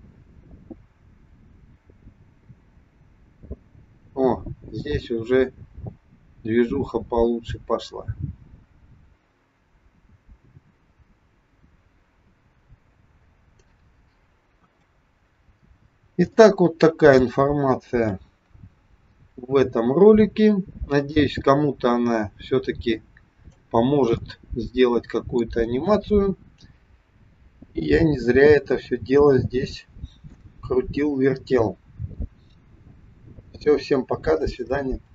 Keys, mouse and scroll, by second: 14.5 KP_1, 14.8-15.6 scroll down 2, 15.6-16.1 scroll down 1, 16.2 shift+middle click, 17.6-18.1 scroll down 1, 18.1 KP_1, 18.7-19.4 scroll up 1, 21.1 click, 24.2 middle click, 25.8 KP_1, 26.8-27.2 scroll up 2, 28.2 shift+middle click.